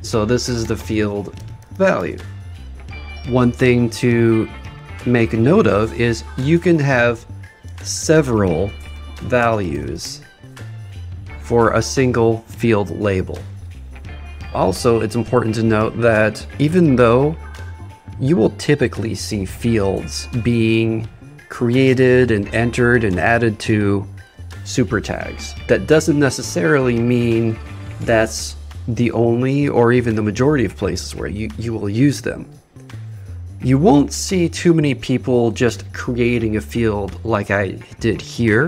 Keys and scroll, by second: 7.9 shift+s.